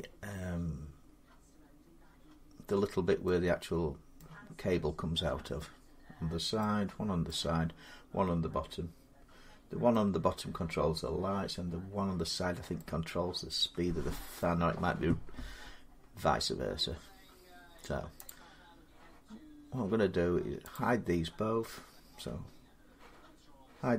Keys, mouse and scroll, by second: 4.0-12.1 middle drag, 14.1 middle click, 15.3-16.3 scroll down 3, 16.3-18.0 scroll up 3, 18.0 click, 20.5 click.